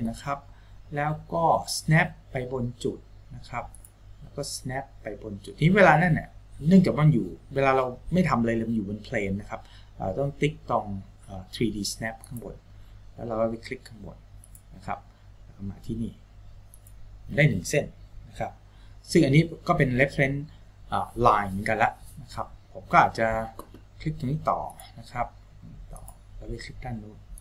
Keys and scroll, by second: 18.7 Escape.